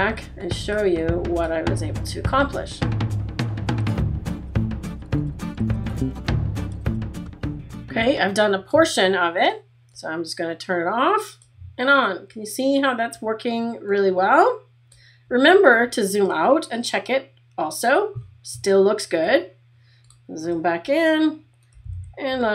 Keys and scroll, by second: 15.8 space, 19.2 space, 21.9 super+=.